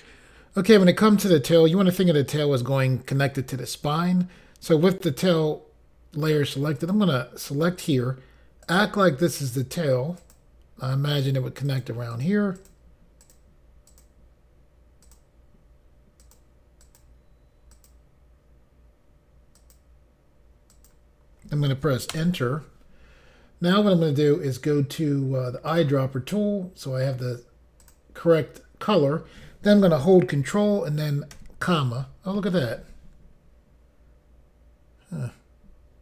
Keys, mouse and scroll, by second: 6.8 click, 7.8 click, 8.6 click, 9.3 click, 10.2 click, 11.6 click, 12.1 click, 12.2 double click, 12.5 double click, 13.2 double click, 13.3 double click, 13.9 click, 15.0 click, 16.2 click, 16.8 click, 17.7 click, 19.5 click, 20.7 click, 22.1 Return, 25.7 click, 27.8 click, 31.3 ctrl+,.